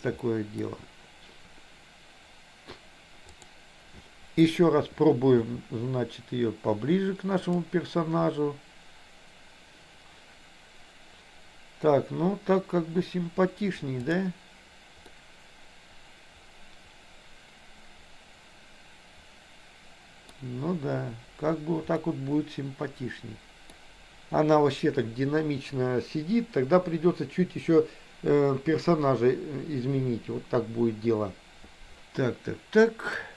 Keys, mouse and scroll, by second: 0.3 middle click, 3.4 click, 5.4 r, 14.0 click, 15.1-20.4 middle drag, 22.0-23.8 middle drag, 33.2-33.3 middle drag.